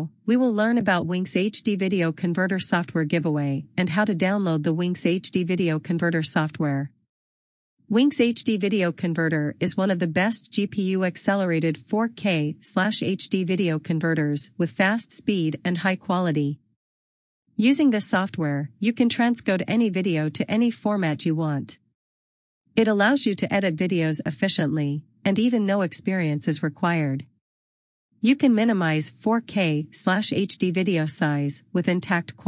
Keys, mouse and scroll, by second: 12.2 click, 17.4 click, 22.3 click, 28.1 click.